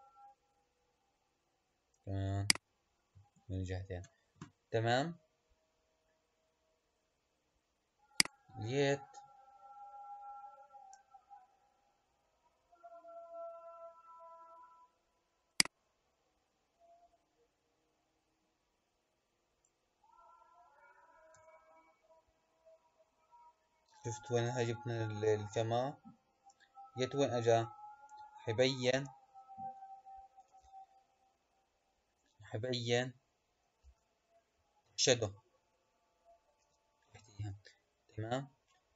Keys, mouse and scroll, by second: 2.3 click, 8.1 click, 10.9-13.1 middle drag, 13.1-15.4 scroll down 4, 15.4 click, 21.3 KP_0, 26.5-28.9 middle drag, 28.9 space, 30.6 space, 32.0 KP_0, 33.9 space, 36.8 space.